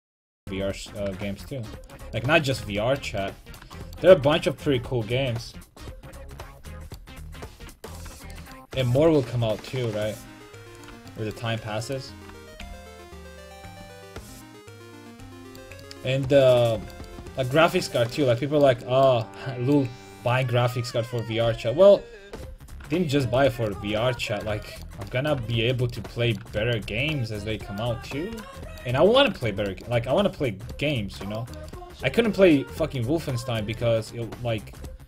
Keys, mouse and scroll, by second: 2.0-4.0 drag, 2.2 middle click, 2.9 middle click, 4.0-5.8 middle drag, 8.0-10.8 right drag, 9.0 g, 10.9-13.2 drag, 11.9-14.0 right drag, 12.6 g, 15.0-16.2 drag, 15.1 a, 20.4-22.0 right drag, 21.5 g, 26.2-27.2 middle drag, 34.8 right click.